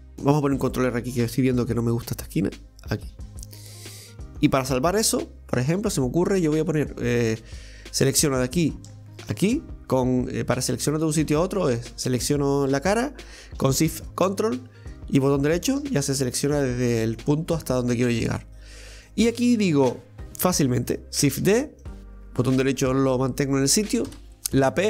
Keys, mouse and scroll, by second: 1.4 ctrl+r, 5.1-6.3 middle drag, 6.3 right click, 7.2 click, 8.1 right click, 9.2 ctrl+shift+right click, 12.1 right click, 15.4 ctrl+shift+right click, 16.6-21.2 middle drag.